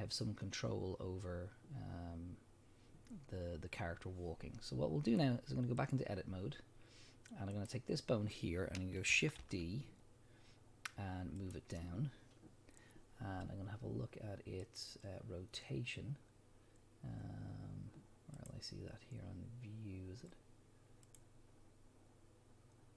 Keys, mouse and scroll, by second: 5.1-7.7 drag, 9.4 shift+d, 11.5 click, 14.6 click, 18.3 click, 21.0 click.